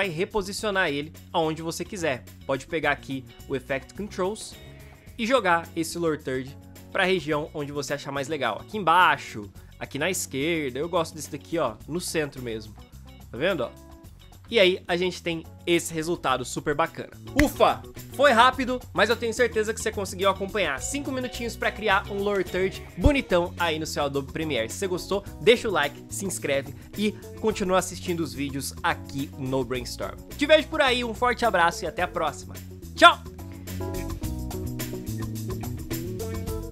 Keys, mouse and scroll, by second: 12.5 space, 12.8 v, 14.5 v, 17.2 space.